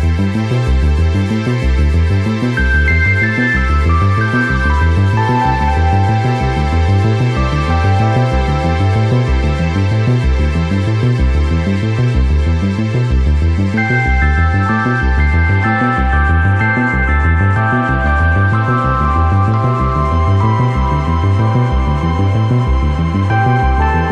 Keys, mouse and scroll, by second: 0.2 right click, 0.6 l, 0.8 click, 1.2 right click, 1.3 l, 1.6 click, 2.2 right drag, 2.6 l, 3.0-3.4 drag, 3.4-4.3 right drag, 4.3 l, 4.6 click, 4.9 right click, 5.2 l, 5.6 click, 5.9 right click, 6.4 Tab, 7.2 click, 8.6 KP_1, 8.9 scroll down 1, 9.0 shift+middle click, 9.2 shift+a, 10.1 middle click, 10.4-14.0 typing, 11.7 scroll down 1, 13.0 scroll down 1, 13.7 middle click, 15.0-17.6 typing, 17.3-17.6 scroll up 1, 18.5-19.4 drag, 20.5-21.7 drag, 22.4 right click, 23.4 click.